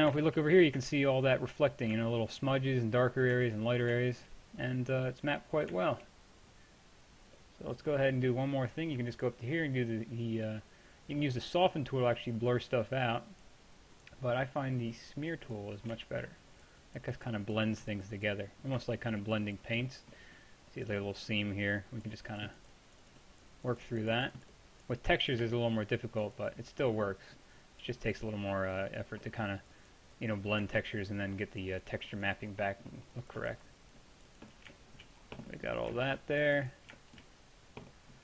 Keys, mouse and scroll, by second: 9.2-10.9 drag, 12.4 middle drag, 15.8-16.6 middle drag, 17.2-18.2 middle drag, 18.5-22.1 middle drag, 25.6-31.4 middle drag, 31.4-32.9 drag, 32.9-38.2 middle drag, 35.0 click.